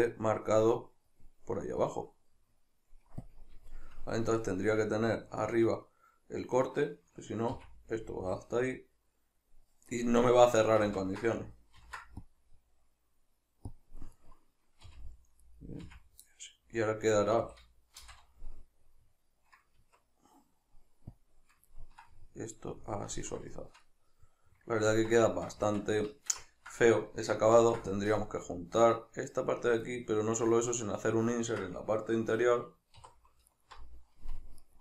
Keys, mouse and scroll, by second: 0.5-3.3 middle drag, 3.3 click, 3.7-6.7 shift+middle drag, 6.7 right click, 7.5 f, 13.8 click, 14.2 right click, 14.9 f, 15.5 right click, 15.9 f, 16.3-21.2 middle drag, 17.4 a, 18.0 shift+n, 19.8 Tab, 21.2-21.8 drag, 21.8-29.6 ctrl+middle drag, 25.7 Tab, 27.6 ctrl+r, 29.6 click, 29.8-33.5 middle drag, 33.0 3, 33.5 alt+right click, 34.6 alt+right click.